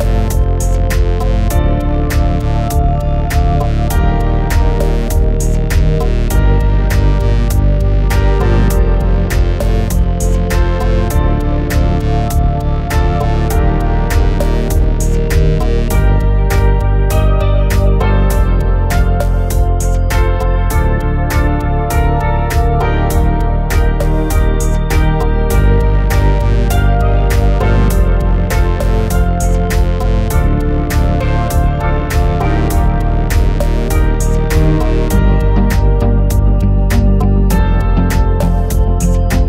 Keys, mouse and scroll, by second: 0.2 alt+s, 2.5 click, 3.9 middle click, 5.1 click, 5.6 alt+s, 7.1 click, 8.3 alt+s, 9.0 click, 9.5 click, 9.9 middle click, 10.8 alt+s, 11.7 click, 13.1 middle click, 15.2 middle click, 15.7 alt+s, 16.6 click, 17.3 click, 18.3 alt+s, 19.6 click, 20.2 middle click, 21.5 Tab, 22.0-23.1 middle drag, 24.0-24.4 shift+middle drag, 27.9 click, 29.6 click, 37.3 4.